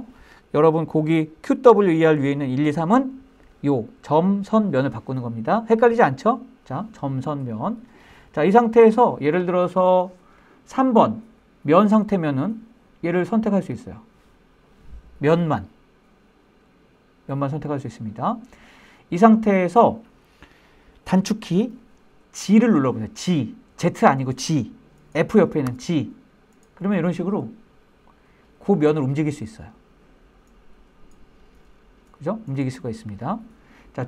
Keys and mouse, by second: 24.8 g.